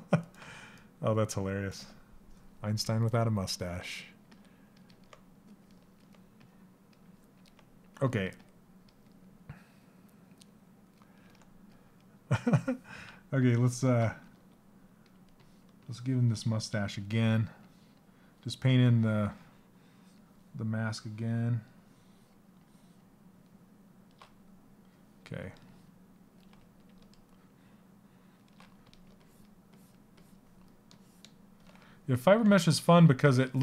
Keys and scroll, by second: 13.7 s.